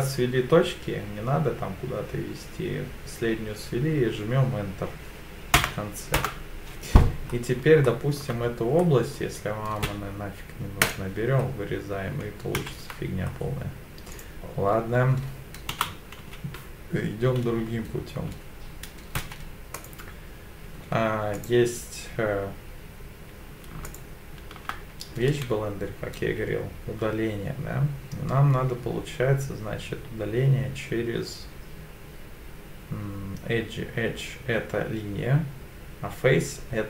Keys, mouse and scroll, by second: 7.3-7.6 scroll up 2, 7.8 shift+middle click, 8.8 middle click, 9.8 x, 11.5-12.3 scroll down 3, 12.6 ctrl+z, 13.2 scroll up 2, 14.1 click, 15.9 3, 15.9 4, 15.9 e, 16.2 e, 19.2 2, 19.7 click, 20.6 3, 21.3 click, 23.8 shift+click, 26.2 x.